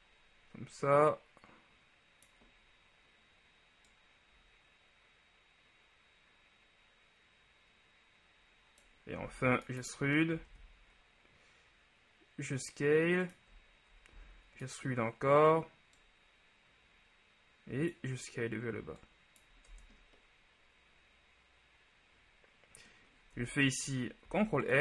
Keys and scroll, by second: 9.4 e, 10.4 s, 14.2 shift+e, 19.9 Tab, 23.6 Tab, 24.4 ctrl+r.